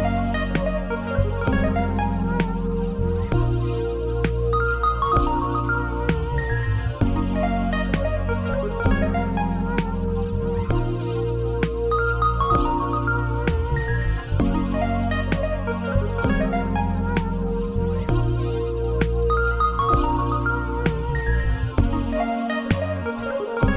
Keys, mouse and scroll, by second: 1.3 scroll down 1, 1.8 scroll down 1, 2.0 Tab, 2.4 click, 3.2 x, 3.6 scroll up 1, 3.6 middle click, 4.2 scroll up 1, 4.7-5.1 scroll up 1, 5.1 scroll down 1, 6.2 click, 6.4 Tab, 8.0 middle click, 8.7-11.4 middle drag, 11.4 e, 11.6 click, 12.1-13.4 drag, 13.4 middle click, 14.4 s, 15.6-16.1 scroll down 2, 16.1-18.6 scroll down 1, 20.1-21.4 drag, 21.4-22.3 scroll up 2, 22.3-23.7 middle drag.